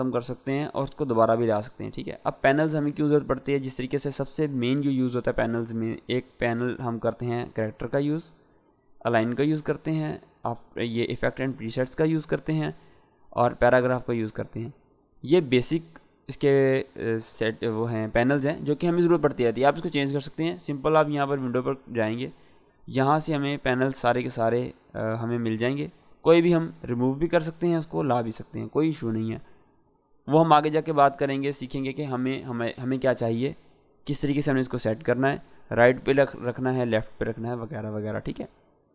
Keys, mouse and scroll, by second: 1.0 click, 7.2-8.1 drag, 13.0 click, 21.3 click, 38.8 click.